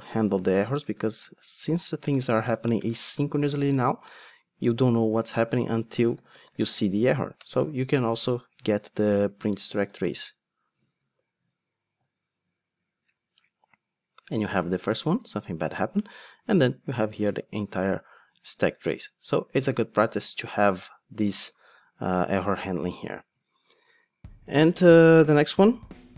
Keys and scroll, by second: 0.7 alt+BackSpace, 7.4 Return, 9.8 ctrl+shift+d.